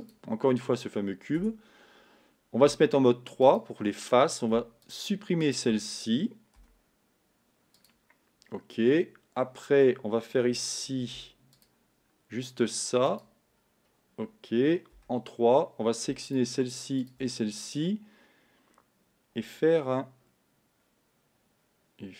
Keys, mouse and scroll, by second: 1.7 Tab, 3.7 click, 5.1 shift+click, 5.7 shift+click, 8.0 x, 8.8 scroll down 2, 11.0 ctrl+r, 13.6-14.2 scroll up 2, 15.1 3, 16.4 shift+click, 17.1 shift+click.